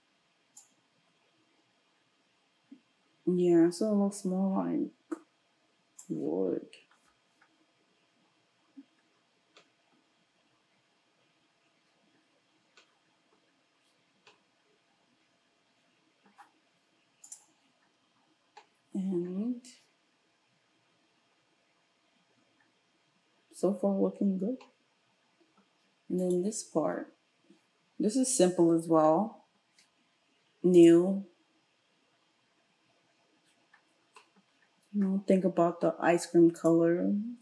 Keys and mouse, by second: 17.2 click, 17.3-26.2 middle drag, 26.2 click, 26.4-32.9 middle drag, 32.9-36.8 drag, 36.8-37.4 middle drag.